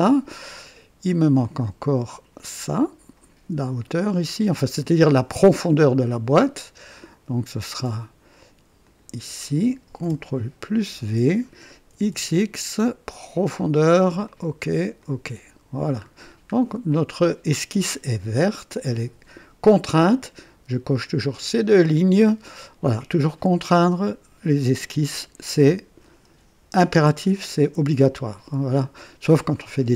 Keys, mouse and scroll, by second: 2.0 click, 4.5 click, 7.0 click, 8.8 click, 10.6 v, 11.9 x, 11.9 x, 12.1 x, 13.4 click, 14.2 click, 15.0 click, 15.9-16.6 scroll down 2, 16.9 right click.